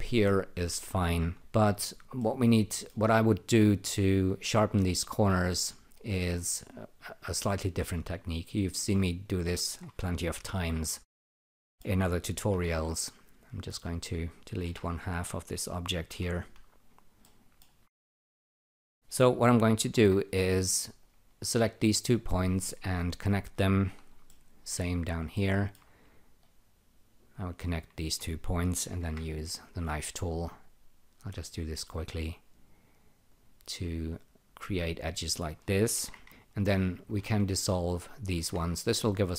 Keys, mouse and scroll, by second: 1.3 e, 2.2 alt+middle click, 10.4 F2, 11.5 alt+middle click, 12.2-13.0 typing, 13.1 click, 14.6 Delete, 16.1 F1, 17.2 alt+middle click, 18.2 alt+right click, 19.8 l, 20.0 l, 21.0 click, 22.6 <, 24.3 alt+middle click, 25.3 alt+middle click, 26.4 click, 27.6 <, 28.9 k, 29.0 k, 30.0 click, 33.3 click, 35.8 Tab, 35.9 w, 36.2 e, 36.9 click, 37.2 shift+., 38.1 click, 38.3 shift+>.